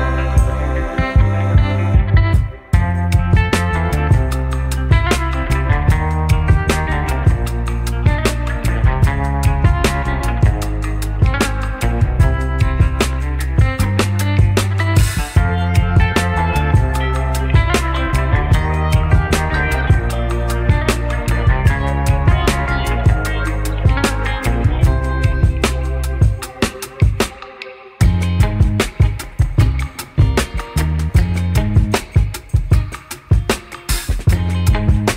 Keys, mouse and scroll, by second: 0.8 shift+a, 8.9-10.0 drag, 11.0 middle click, 11.2 click, 12.9-14.3 drag, 22.0 click, 22.3 middle click, 22.8-23.7 middle drag, 23.7-25.5 drag, 25.8-26.8 middle drag, 28.0 m, 30.1 m, 31.7 middle click, 32.9 shift+middle click, 34.4-35.1 drag.